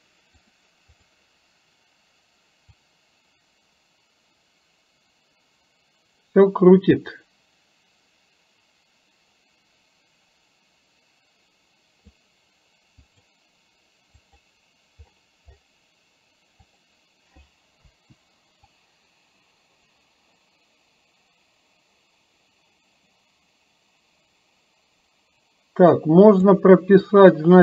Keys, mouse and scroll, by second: 0.5 click, 1.0 click, 3.0-12.4 drag, 13.1 click, 14.1 click, 16.6 click, 18.7-26.6 drag.